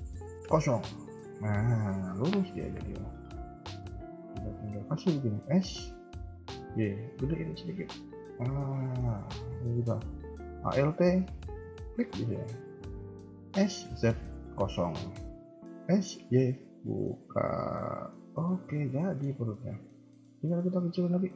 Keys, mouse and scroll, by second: 1.3 KP_1, 1.7 KP_3, 2.1 KP_1, 2.5 KP_3, 5.3 s, 8.7 shift+middle click, 11.4 alt+click, 13.4 s, 18.3 s, 18.3 KP_1, 18.6 scroll down 2, 18.9 middle click, 19.2 KP_1, 19.5-21.3 scroll up 1.